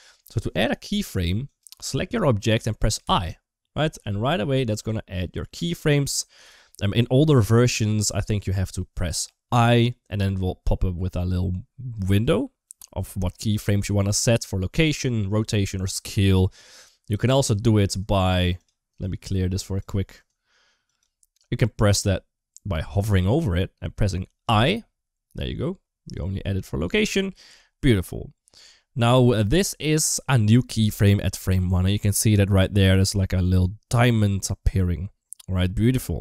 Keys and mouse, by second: 1.4 click, 2.8 i, 4.6 click, 9.3 i, 18.0-19.7 right drag, 20.1 right click, 24.3 i, 30.3 click, 30.6 click, 32.7 click.